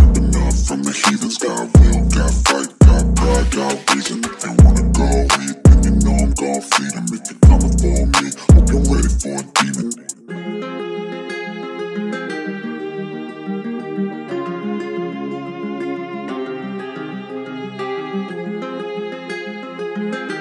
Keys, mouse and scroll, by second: 0.8 click, 5.8 click, 8.0 click, 8.4 v, 9.8 click, 19.3 Tab.